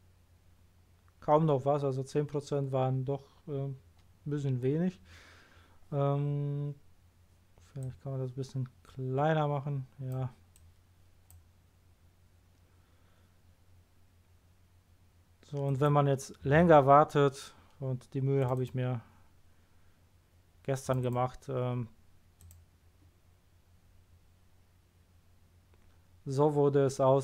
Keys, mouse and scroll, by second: 4.6-4.9 scroll up 1, 7.8-9.4 drag, 10.5 click, 15.6 click, 18.4 click, 18.5 click, 20.8 click, 21.0 click, 22.4 click.